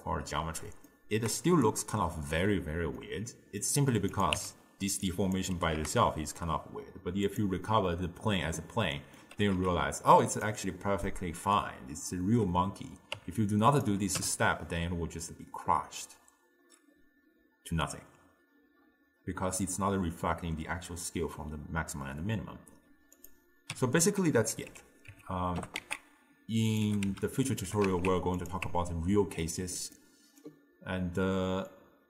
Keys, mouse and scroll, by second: 1.5 d, 1.7 right click, 2.4 d, 3.0-4.2 middle drag, 4.2 click, 4.4 Tab, 5.1 click, 5.7 g, 7.7-9.4 middle drag, 9.4 g, 11.1-13.2 middle drag, 13.2 Tab, 13.8 click, 14.2 m, 23.2 click, 23.8 m, 25.1 Tab, 25.6 g, 26.9 g, 27.7 g, 28.7 Tab, 30.0-31.7 middle drag, 31.7 click.